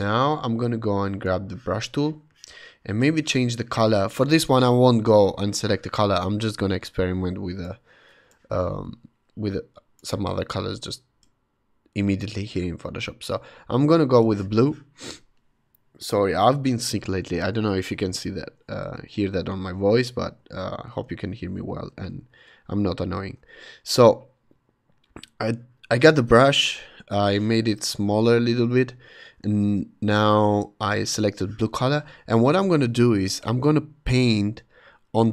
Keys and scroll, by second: 18.7 [, 20.3 ], 20.9 [, 23.3 ], 24.3 ], 27.9 [, 29.2 ].